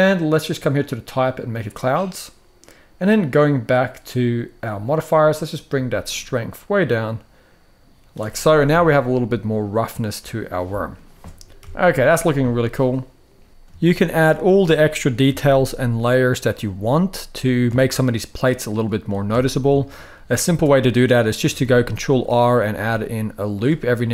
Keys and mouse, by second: 0.5-1.4 drag, 4.4 click, 5.6-7.8 shift+drag, 8.1 middle drag, 8.4 alt+a, 8.7-9.9 middle drag, 10.4-10.7 middle drag, 11.3 KP_1, 13.5 shift+Tab, 13.5 shift+middle drag, 14.2 ctrl+r, 15.0 g, 15.1 g, 16.1 click, 16.4 s, 17.2 click, 17.6 Tab, 18.0-18.7 middle drag, 19.0 Tab, 19.5 shift+middle click, 20.2 ctrl+r, 21.1 g, 21.3 g, 22.3 click, 22.6 s, 23.8 middle click.